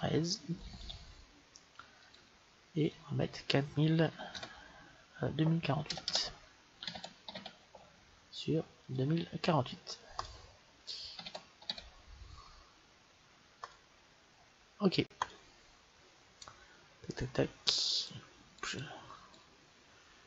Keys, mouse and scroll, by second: 6.0 BackSpace, 16.4-17.9 middle drag, 17.9-20.2 drag.